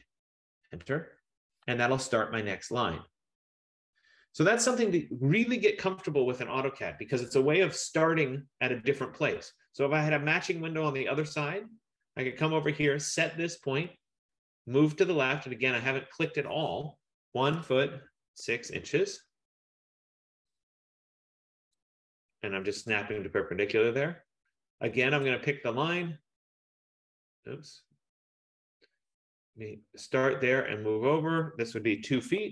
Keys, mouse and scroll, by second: 0.0-0.4 typing, 0.6 Return, 5.1 click, 5.8 Return, 7.4-8.1 scroll, 10.6 click, 14.1 click, 17.5-18.9 typing, 18.9 Return, 22.0 click, 22.9 Return, 25.4 click, 28.3-30.3 scroll, 32.2-32.5 typing.